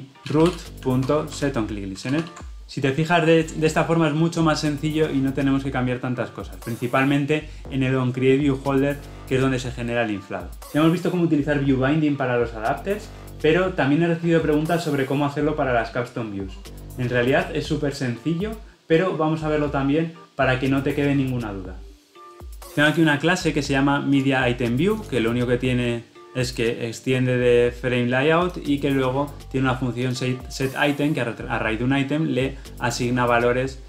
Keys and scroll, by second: 1.3 Escape, 1.9 Escape, 2.1 ctrl+alt+o.